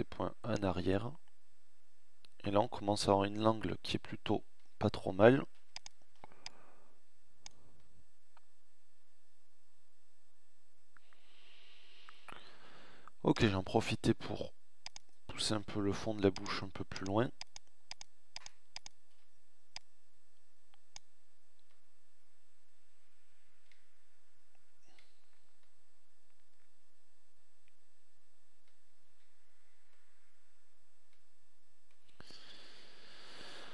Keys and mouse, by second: 0.8 middle click, 1.0 middle click, 5.4 click, 6.7 middle click, 7.0 middle click, 7.4 middle click, 12.7 middle click, 12.9 middle click, 18.7 middle click, 20.3 middle click, 28.0 Tab.